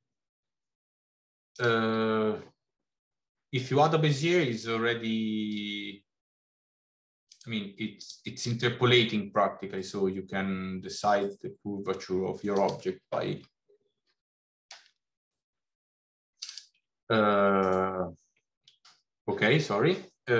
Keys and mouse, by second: 1.3 click, 5.3 s, 7.9 click, 8.4 s, 16.5 click, 19.1 s.